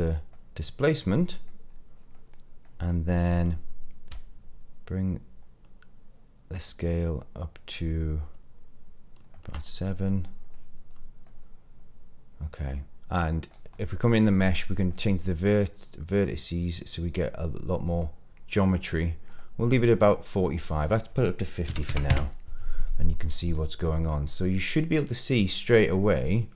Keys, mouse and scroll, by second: 0.9 middle click, 1.4 scroll down 1, 1.6 scroll up 2, 2.1 middle click, 2.8 scroll up 2, 3.1 middle click, 4.1-9.3 shift+drag, 9.6 middle click, 10.2 middle click, 11.2-13.4 drag, 13.7 middle click, 14.8-19.3 drag, 20.5-22.0 drag, 23.2-23.8 middle drag, 24.0 scroll up 2, 24.3-26.5 middle drag.